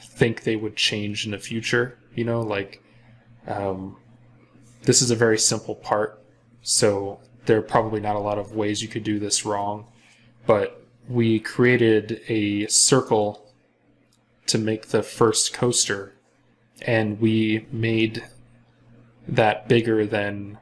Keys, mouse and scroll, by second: 14.0 scroll up 1.